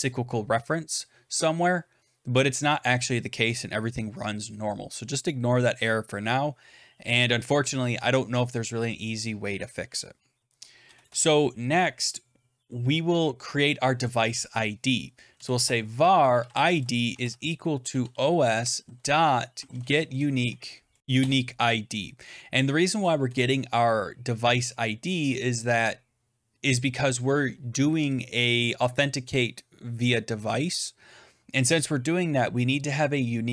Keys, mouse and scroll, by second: 10.7 Return, 10.9 Return, 15.0-21.0 typing, 21.1 Return, 23.2 Return, 27.1 Return.